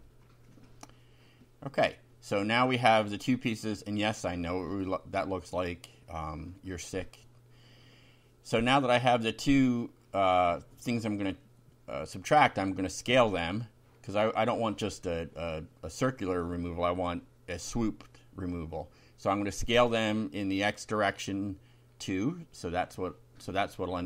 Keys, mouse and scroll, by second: 3.4 ctrl+r, 4.1 click, 10.1-14.3 typing, 12.7 Left, 15.9-17.5 typing, 18.3 End, 19.9 shift+[, 20.4 shift+Down, 21.0 shift+End, 21.2 shift+Return, 22.0 shift+], 22.4 shift+F5.